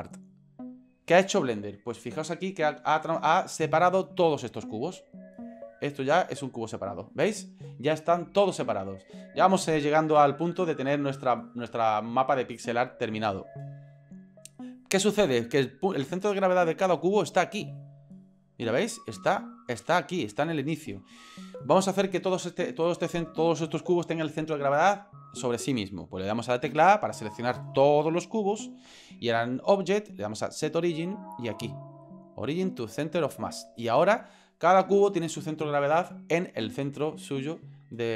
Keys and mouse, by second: 4.8-5.2 drag, 6.5 right click, 10.5 ctrl+z, 18.1-19.5 right drag, 20.9 ctrl+z, 26.7 a, 29.6-33.7 drag.